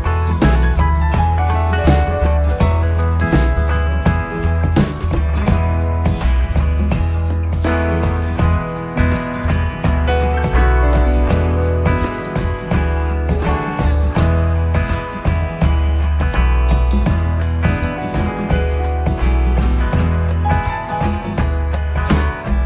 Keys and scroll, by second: 3.5 Delete, 6.9 ctrl+c, 7.0 ctrl+v, 18.3 Up, 18.9 Down, 19.1 Right.